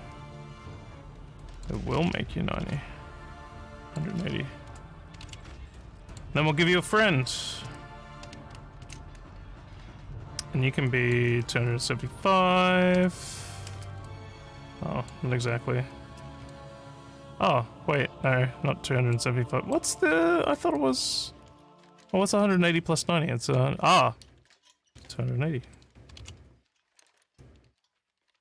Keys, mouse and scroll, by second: 1.4 click, 3.8 click, 4.7 1, 6.1 click, 6.8 click, 8.8 ctrl+v, 10.9 click, 12.2 2, 12.9 5, 14.1-15.1 alt+drag, 16.5-19.1 alt+drag, 19.5 alt+middle click, 20.8 click, 25.6 2.